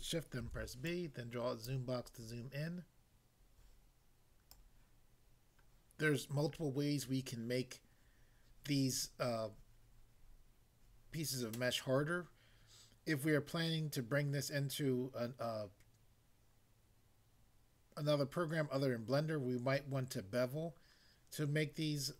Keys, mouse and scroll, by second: 0.5 b, 0.8 click, 1.7 click, 4.5 click.